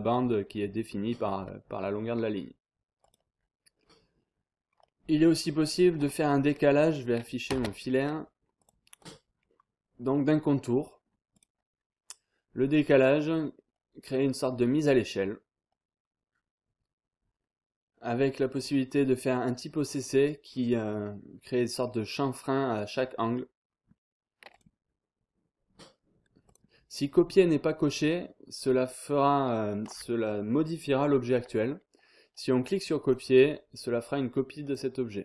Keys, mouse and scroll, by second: 3.0 click, 3.6 scroll down 1, 3.8-4.4 scroll up 1, 4.7 scroll down 1, 4.8-5.4 scroll up 1, 5.9 click, 7.5 space, 8.0 scroll down 2, 8.2-8.6 scroll up 2, 8.6 click, 9.5-10.0 scroll down 1, 11.3 click, 13.2-13.8 scroll down 1, 14.0-15.0 scroll up 2, 18.5 click, 20.5-21.0 scroll down 1, 21.1-21.7 scroll up 1, 21.8-22.4 scroll down 2, 22.5-23.0 scroll up 2, 24.5 click, 26.5 click, 33.0 click, 34.6 click.